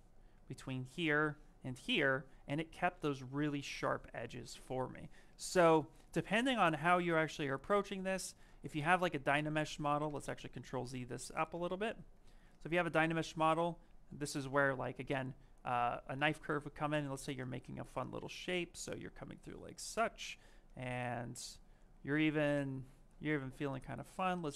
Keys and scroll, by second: 0.5 ctrl+shift+space, 2.8 shift+f, 3.6 shift+f, 8.6 ctrl+z, 11.1 shift+f, 11.4 ctrl+z, 22.0 space, 23.3 ctrl+shift+space.